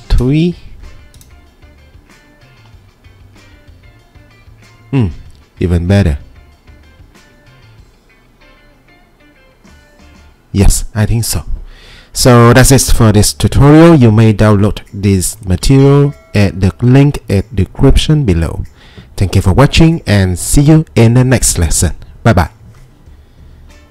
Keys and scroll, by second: 0.0-0.5 typing.